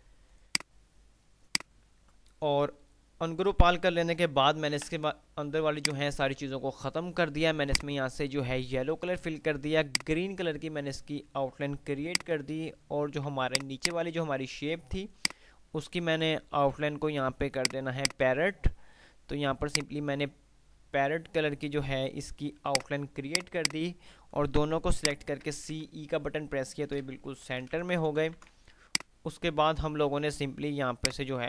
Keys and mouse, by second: 5.0 Delete, 6.0 click, 10.1 right click, 12.3 alt+click, 17.8 click, 22.6 right click, 23.5 click, 25.6-26.0 typing, 27.1 ctrl+g, 27.6 Delete, 28.3 ctrl+z, 29.3-29.8 drag.